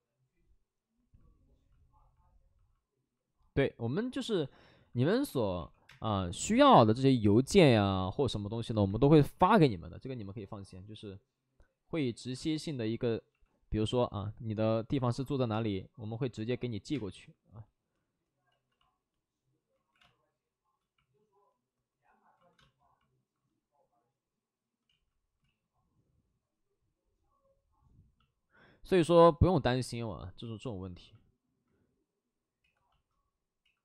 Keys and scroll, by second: 4.4 shift+f, 5.0 shift+f, 5.5 ctrl+d, 5.5 2, 5.8 space, 8.0 ctrl+z, 8.7 5, 9.1 5, 9.1 space, 11.9 ctrl+z, 12.3 space, 13.2 space, 13.2 b, 15.5 space, 16.7 ctrl+z, 16.9 space, 18.5 ctrl+z, 19.9 ctrl+z, 19.9 space, 22.3 ctrl+z, 22.3 space, 24.8 ctrl+z, 26.4 ctrl+z, 28.9 alt+s, 32.5 ctrl+z.